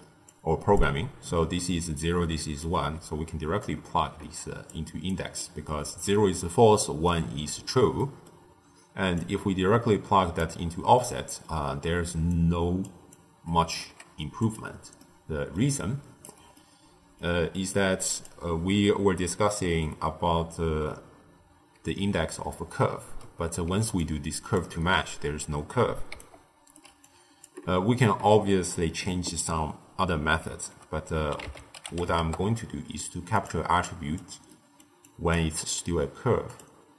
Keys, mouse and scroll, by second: 0.0-2.8 typing, 0.2-0.7 drag, 2.3 click, 3.5 click, 5.0 click, 7.9-9.1 middle drag, 9.1 drag, 10.9-12.2 middle drag, 12.2 click, 13.0 click, 13.7 g, 14.9 middle click, 15.5 d, 15.7 right click, 16.2 d, 16.5-17.6 middle drag, 17.6 click, 23.6 d, 24.0 click, 24.5 d, 24.6 d, 26.0 d, 26.1-26.7 right drag, 26.7 d, 26.9 click, 30.4 ctrl+a, 33.8 click, 34.4-35.0 middle drag, 35.0 click, 36.4-36.9 drag.